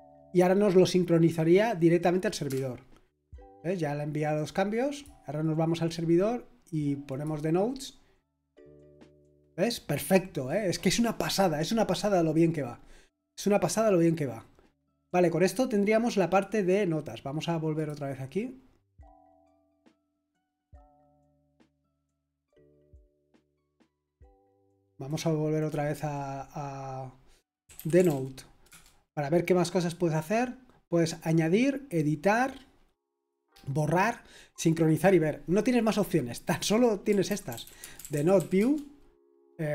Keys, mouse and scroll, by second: 2.4 Return, 4.9 click, 7.1 click, 8.5 click, 17.7 click, 20.6 click, 22.4 click, 24.4 click, 25.0 click, 27.4-28.5 typing, 28.7 Return, 36.8-38.8 typing.